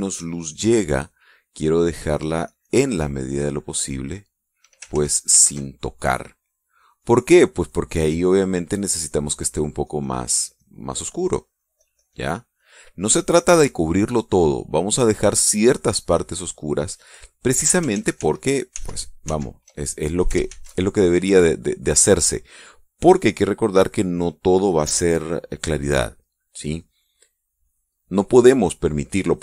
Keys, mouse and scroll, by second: 0.1 click, 1.1 click, 2.8 click, 3.8 click, 4.5 click, 5.5 ctrl+z, 7.2-9.3 drag, 9.3-13.5 drag, 14.9 click, 16.5 click, 18.5 ctrl+z, 21.1 ctrl+shift+z, 21.8 click, 22.1 click.